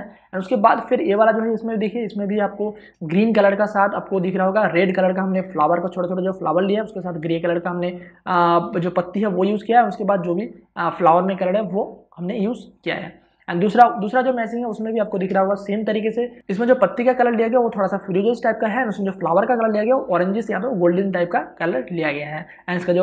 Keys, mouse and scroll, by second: 3.0 space, 3.2-14.2 ctrl+drag, 15.1 click, 15.6 space, 16.0 ctrl+click.